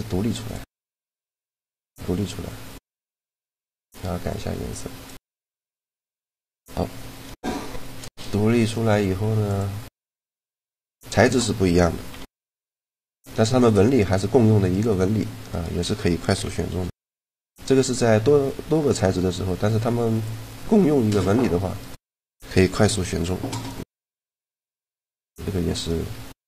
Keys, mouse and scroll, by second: 0.2-3.1 drag, 3.4-5.0 drag, 5.2-6.9 middle drag, 6.9 right click, 8.4 right click, 9.2 middle click, 10.0 click, 11.1-12.6 right drag, 11.8 shift+l, 13.6 middle click, 14.4-16.3 right drag, 16.1 shift+l, 16.3 click, 16.5 right click, 17.5-18.7 middle drag, 20.9 middle click, 21.6-23.3 right drag, 22.5 shift+l, 23.8 middle click, 25.1 a, 25.6-26.4 right drag.